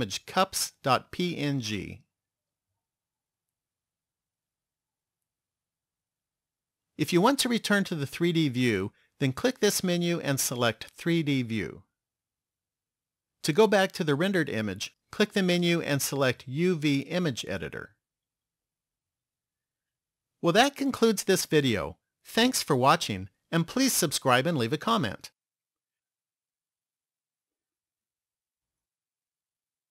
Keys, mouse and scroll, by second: 15.7 click.